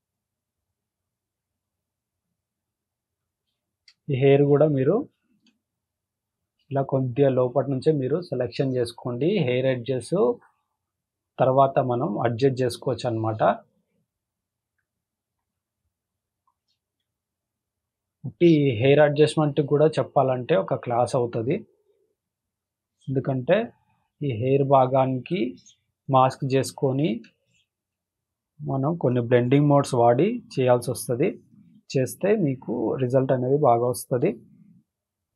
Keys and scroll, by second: 3.2 space, 3.7 space, 5.4 space, 6.4 space, 6.9 space, 8.4 space, 8.9 space, 11.4 space, 11.9 space, 13.6 space, 16.4 space, 16.9 space, 18.6 space, 20.6 space, 21.2 space, 23.2 space, 25.3 space, 25.8 space, 27.8 space, 29.6 space, 31.4 space, 31.9 space, 33.5 space, 34.0 space.